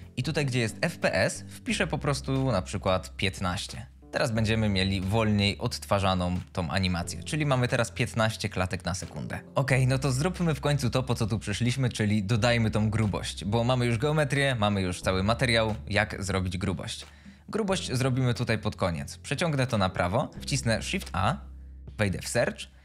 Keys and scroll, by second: 2.7 End, 2.9 5, 3.3 Return, 3.9 space, 9.4 ctrl+s, 21.1 shift+a.